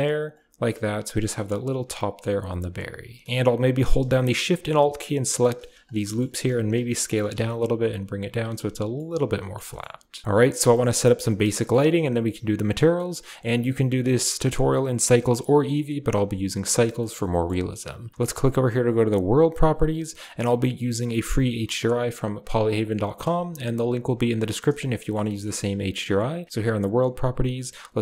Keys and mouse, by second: 0.2 Tab, 1.1-2.1 drag, 1.5 middle drag, 2.0 middle click, 2.2 Tab, 3.1 1, 4.5 alt+shift+click, 5.2 alt+shift+click, 5.7 shift+right click, 5.9 click, 6.2 s, 7.0 g, 8.3 Tab, 8.8-9.4 drag, 9.5 shift+drag, 10.2 shift+click, 10.2-10.7 middle drag, 11.1 middle click, 11.5 shift+click, 13.2 click, 13.5 click, 14.5-16.6 drag, 17.2 middle click, 19.1 click, 20.2 click, 25.1 middle drag.